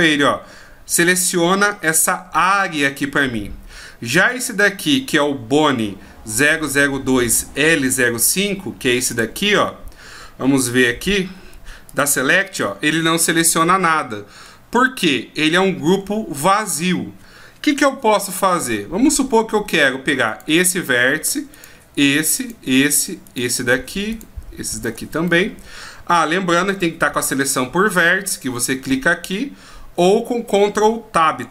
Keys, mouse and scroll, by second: 7.5-7.8 scroll up 1, 9.1 click, 9.1-10.0 scroll up 4, 10.6 a, 11.9 click, 13.6 middle click, 20.3 right click, 21.5 shift+right click, 22.4 shift+right click, 23.2 shift+right click, 24.1 shift+right click, 24.7 shift+right click, 25.3 middle click, 31.4 ctrl+Tab.